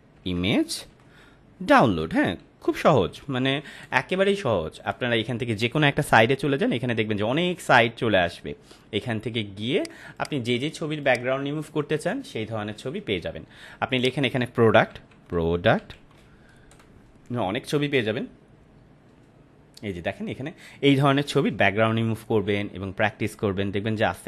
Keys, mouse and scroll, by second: 0.0-2.0 typing, 3.8 Return, 7.5 scroll down 1, 9.7 right click, 10.1 click, 13.9 click, 14.9 p, 16.7 Return, 19.6 scroll down 1.